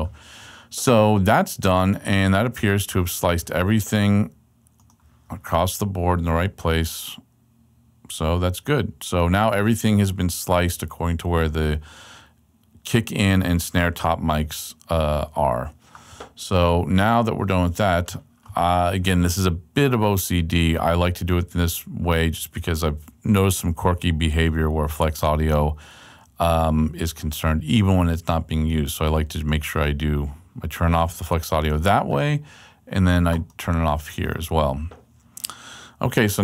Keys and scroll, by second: 5.8 super+Right, 8.1 super+Left, 36.3 super+Left.